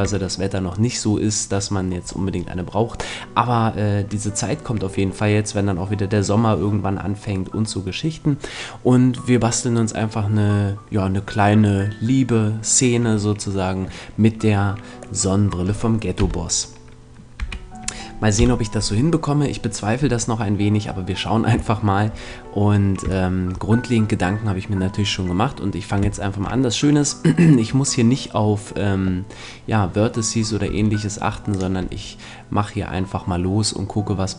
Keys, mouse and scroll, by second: 1.0-6.2 middle drag, 15.2-16.2 middle drag, 16.2 KP_Decimal, 17.4 KP_5, 18.4 KP_7, 21.8-29.3 middle drag, 30.6 e, 31.6-33.4 drag, 31.8 e.